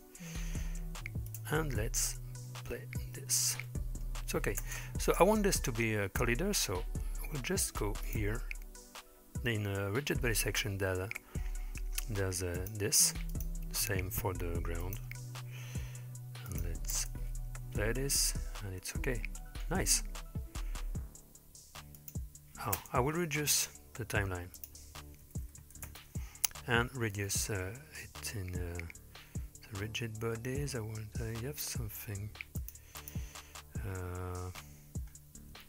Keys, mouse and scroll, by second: 0.3-1.2 scroll down 3, 1.3 click, 3.7-4.0 middle drag, 4.7 space, 5.1 click, 6.1-7.6 scroll down 2, 8.1 click, 8.5-8.9 scroll down 2, 10.7-12.5 scroll down 2, 12.6 click, 13.3 click, 14.9 click, 16.5 click, 17.0 space, 19.5-20.0 scroll down 2, 20.0-20.7 middle drag, 22.0 click, 22.8 space, 24.6-25.9 drag, 25.6 KP_0, 30.1-30.5 scroll down 3, 32.0-32.6 scroll down 2, 32.6 click, 35.1-35.6 scroll up 2.